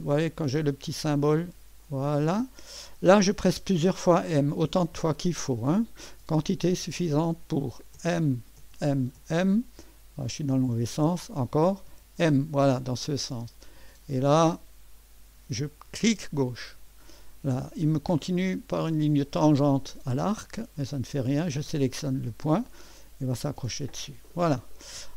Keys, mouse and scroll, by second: 1.8 click, 8.0-9.2 typing, 10.9 typing, 16.0 click, 21.9 click, 24.3 right click.